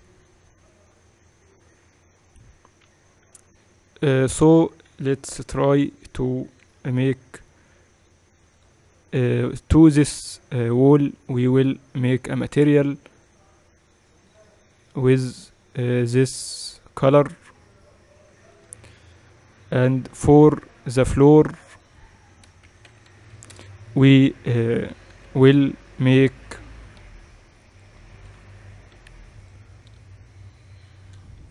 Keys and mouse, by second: 3.8 z, 5.0 Tab, 6.0 KP_0, 7.3 KP_8, 7.4 KP_8, 7.8 KP_6, 9.2 right click, 11.2-12.8 right drag, 13.8-16.8 drag, 20.8-24.2 drag, 23.9 o, 25.8 ctrl+i, 27.6 KP_7, 28.1-31.5 middle drag, 28.9 u.